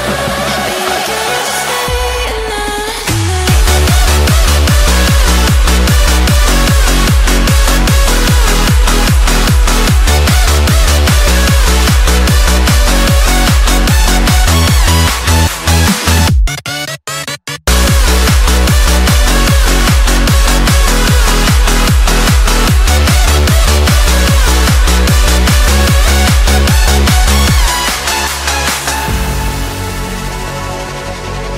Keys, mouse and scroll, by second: 0.7-1.0 scroll up 2, 1.0-1.4 shift+middle drag, 1.4-1.9 scroll up 2, 1.9 shift+d, 2.2 s, 4.7 middle click, 5.1 g, 6.1 KP_1, 6.5 shift+middle click, 6.9-7.3 scroll up 1, 7.3 Tab, 8.6 g, 15.5 Tab, 16.6 click, 17.1 shift+middle click, 17.4 Tab, 18.6 g, 22.9 Tab, 23.6-24.3 shift+middle drag, 24.3 click, 25.3 shift+d, 25.7 r, 29.1 Tab, 29.8 alt+z, 30.1 click, 31.0 alt+z.